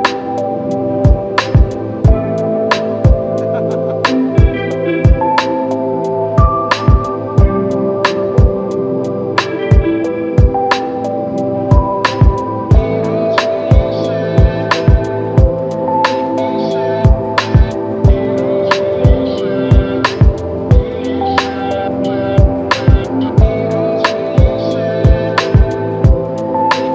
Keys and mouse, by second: 21.4 double click.